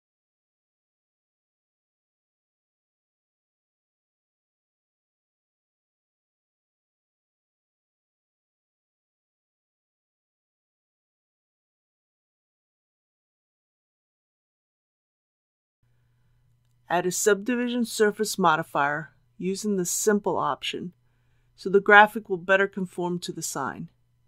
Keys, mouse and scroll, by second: 1.3 typing, 4.3 click, 5.1-5.4 typing, 6.8 click, 7.4 typing, 9.0-10.0 typing, 9.8 click, 12.5-13.7 typing, 15.4 click, 15.8 KP_3, 18.3 click.